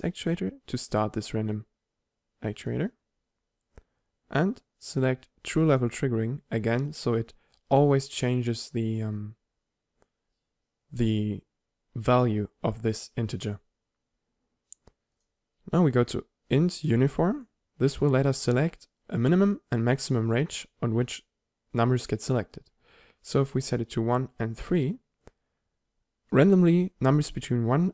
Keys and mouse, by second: 0.5 click, 2.8-5.7 drag, 7.7 click, 16.8 click, 23.6-27.9 drag.